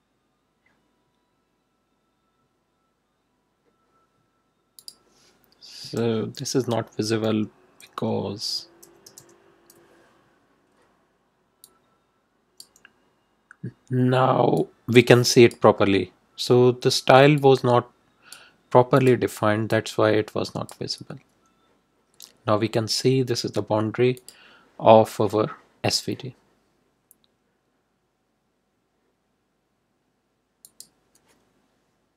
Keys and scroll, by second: 5.7 space, 7.2-9.6 typing.